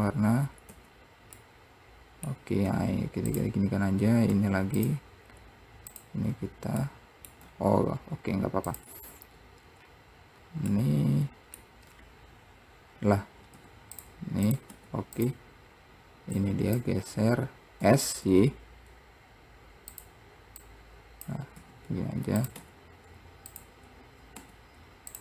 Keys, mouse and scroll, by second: 0.0 click, 0.9 Tab, 1.6-2.8 middle drag, 4.2 scroll up 2, 5.4-6.1 scroll up 2, 6.1 click, 8.3-8.9 scroll down 1, 8.9 click, 9.3-10.0 scroll down 1, 10.6-10.9 scroll down 9, 10.9-13.7 middle drag, 13.7 x, 14.7 click, 16.6 click, 17.2-18.0 scroll up 2, 18.0 s, 20.8 click, 21.8 s.